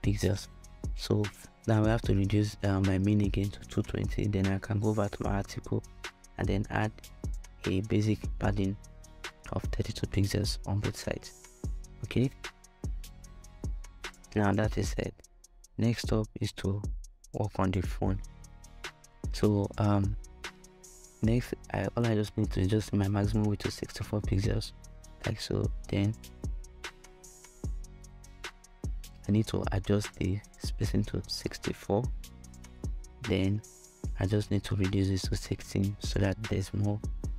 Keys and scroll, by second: 0.6 2, 1.1 0, 1.4 Return, 5.7 3, 6.5 Tab, 6.5 2, 8.1 3, 9.0 Return, 21.6-22.5 typing, 29.0-29.8 typing, 34.2 6, 34.5 Tab, 35.2 6, 35.6 Return.